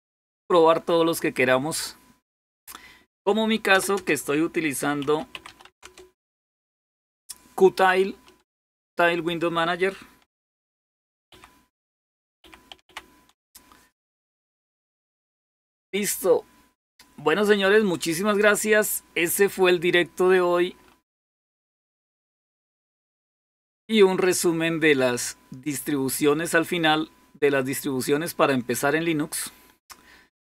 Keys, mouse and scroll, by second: 0.0-0.5 typing, 3.5 Return, 3.8 Return, 4.6-6.3 typing, 9.4-10.2 typing, 11.2 ctrl+-, 11.6 ctrl+-, 20.6-22.6 scroll up 3.